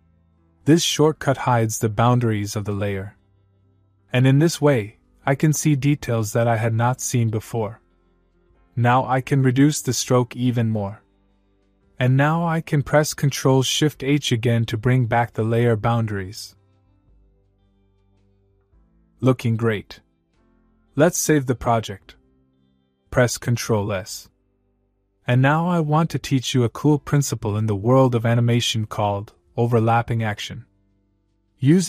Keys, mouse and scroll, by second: 8.1-10.1 drag, 13.5 ctrl+shift+h, 16.5-18.2 click, 19.2 space, 21.7-23.2 click, 23.5 ctrl+s.